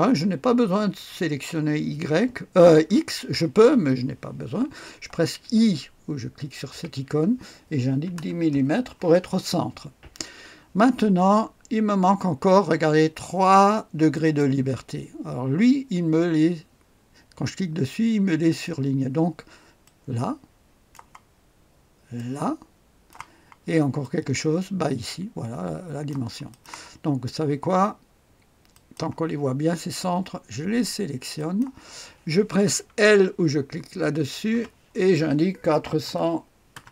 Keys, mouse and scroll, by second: 6.7 i, 7.9 KP_1, 8.1 KP_0, 8.5 Return, 14.1 click, 19.8-21.7 drag, 22.1-23.7 drag, 24.0-27.1 drag, 28.7 click, 31.3 click, 34.5 typing, 35.6 KP_4, 36.0 KP_0, 36.7 KP_0.